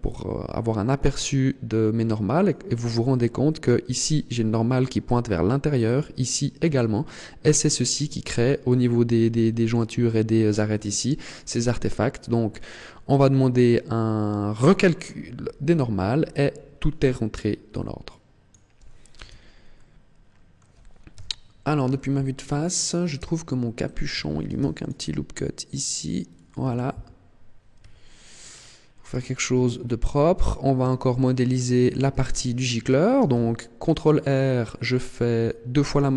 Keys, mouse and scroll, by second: 0.8 click, 14.5 click, 17.9 click, 19.0 Tab, 19.6 middle click, 21.0 KP_1, 21.8 shift+middle click, 22.4-22.8 scroll up 4, 23.0 Tab, 24.3 ctrl+r, 26.2 click, 26.6 ctrl+r, 28.2-28.5 scroll down 8, 29.0 Tab, 29.4-30.0 scroll down 1, 30.0-30.6 scroll up 8, 30.8 shift+middle click, 31.4-31.8 scroll up 2, 31.8 Tab, 33.0 ctrl+r, 35.8 click.